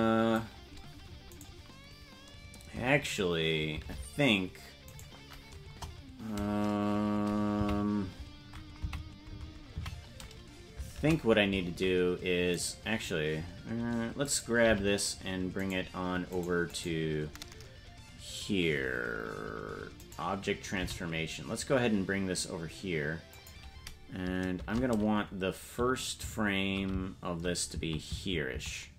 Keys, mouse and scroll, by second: 1.4 right click, 5.6 shift+`, 5.6 KP_0, 7.6 Left, 8.9 Left, 9.4 Left, 9.8 Right, 14.2 right click, 14.6 g, 16.3 right click, 20.6 right click, 20.7 g.